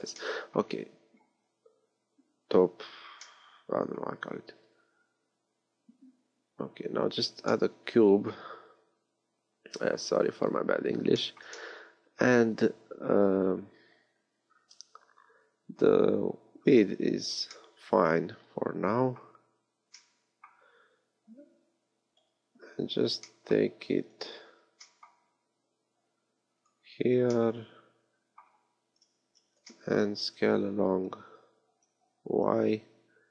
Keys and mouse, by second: 4.4 shift+a, 22.2 KP_3, 24.6 g, 25.3-27.4 drag, 28.9 KP_3, 29.3 z, 29.7-31.3 drag, 31.3 s.